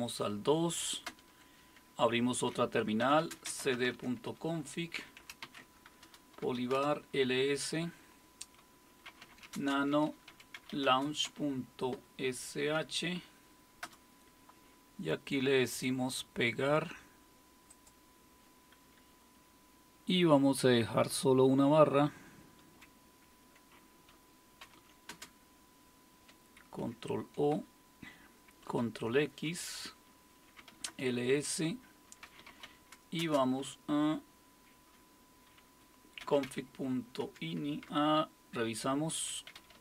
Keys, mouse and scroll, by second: 1.1 super+Return, 2.8-7.2 typing, 8.8-14.3 typing, 15.6-16.3 typing, 15.8-19.4 drag, 19.4 Up, 20.4 Up, 21.1 Left, 21.7-22.6 typing, 24.4-25.1 typing, 26.8 ctrl+o, 27.6 Return, 28.7 ctrl+x, 30.3-33.2 typing, 36.0-39.8 typing, 37.2 Tab.